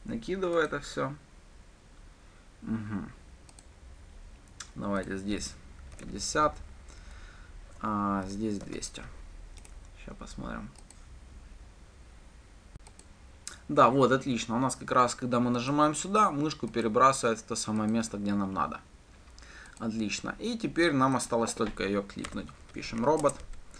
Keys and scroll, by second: 11.3 ctrl+shift+F10, 23.6 Return.